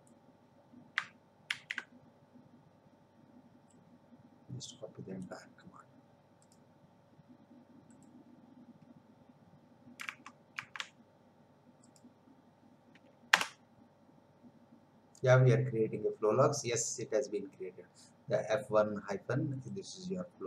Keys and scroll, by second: 1.5 ctrl+v, 10.2 alt+Tab, 13.3 Return.